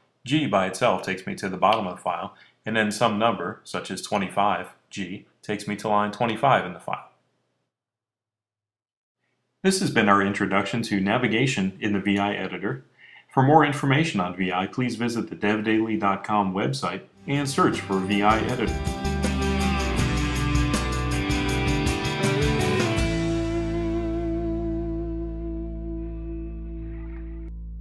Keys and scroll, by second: 2.9-3.9 typing.